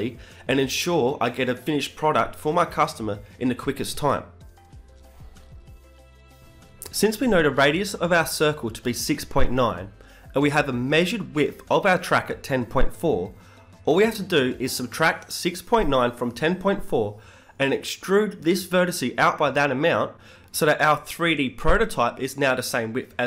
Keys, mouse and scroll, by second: 5.1 middle click, 5.4 Tab, 5.8-8.8 drag, 6.9 b, 7.9 b, 9.2 x, 14.7 Tab, 15.6 Tab, 16.7-19.6 right drag, 17.3 e, 19.2 g.